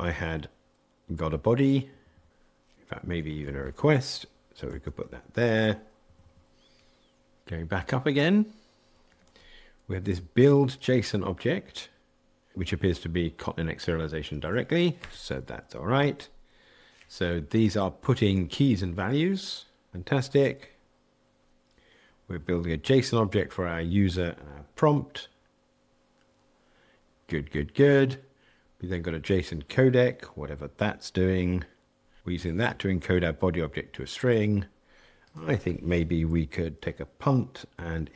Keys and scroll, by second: 4.7 super+v, 11.0 super+b, 14.6 super+[.